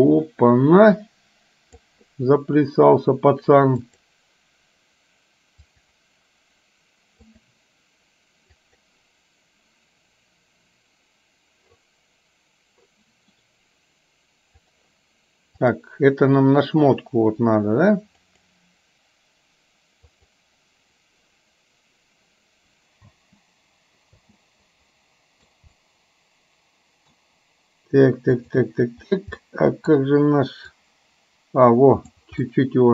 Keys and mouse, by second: 4.0 click, 5.7-7.5 drag, 8.7 click, 14.8 click, 15.7 click, 18.3 click, 20.2 click, 23.2 space, 24.3 space, 24.4-25.5 middle drag, 25.9-27.3 middle drag, 28.4 click, 29.5 middle click, 30.9-32.3 drag, 32.7-32.9 middle drag.